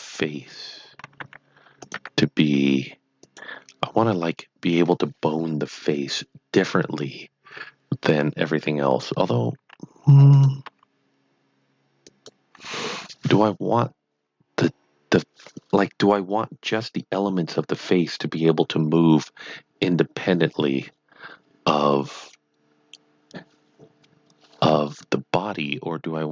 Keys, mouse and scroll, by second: 1.2 s, 3.2 click, 9.5 s, 10.4 click, 10.7 g, 12.0 click.